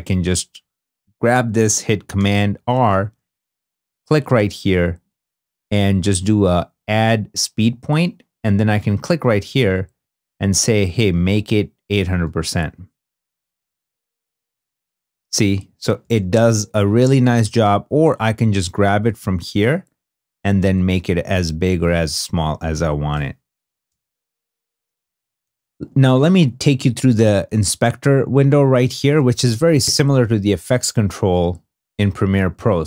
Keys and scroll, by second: 2.1 super+r, 13.6 space, 14.4 2, 15.9 space, 16.7 2, 23.8 space, 25.1 i.